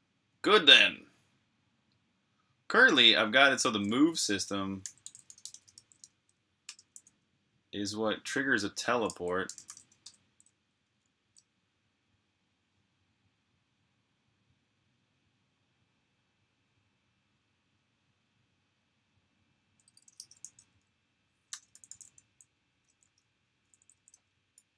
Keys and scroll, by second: 4.4-6.1 typing, 6.4 Return, 8.9-9.6 typing, 9.9 Return, 10.6 ⟲, 20.0-22.1 typing, 23.6-24.7 typing.